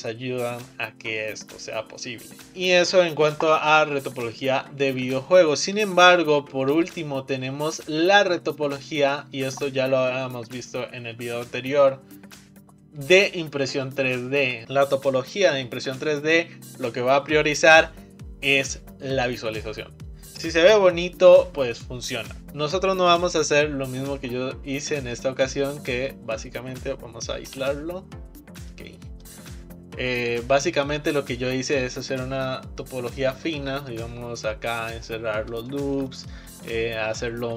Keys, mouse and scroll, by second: 2.5 ctrl+z, 4.4-6.2 scroll down 1, 6.2 shift+middle click, 6.8 Tab, 7.7-8.1 middle drag, 8.1 shift+scroll down 1, 8.2-12.3 shift+middle drag, 13.4-14.3 scroll up 3, 14.3-14.6 shift+middle drag, 22.4-24.4 middle drag, 24.4-25.1 scroll up 2, 25.1-26.3 middle drag, 26.3 scroll down 5, 27.6 KP_Divide, 28.8-29.5 middle drag, 29.5-30.9 scroll up 2, 30.9-33.9 middle drag, 35.8-37.5 shift+middle drag.